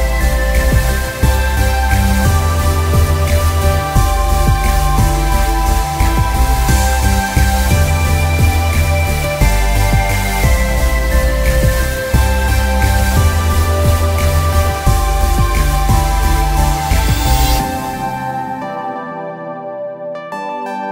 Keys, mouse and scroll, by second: 3.3 alt+scroll down 1, 4.3 click, 6.7 alt+scroll down 1, 7.3 click, 8.2 alt+scroll down 1, 9.4 click, 10.0-10.6 scroll down 1, 10.6 click, 13.1 alt+scroll down 1, 13.4 space, 13.5 click, 13.6 space, 14.0 click, 14.3 ctrl+scroll up 1, 15.9 click, 17.2-17.6 scroll up 2, 19.6 click.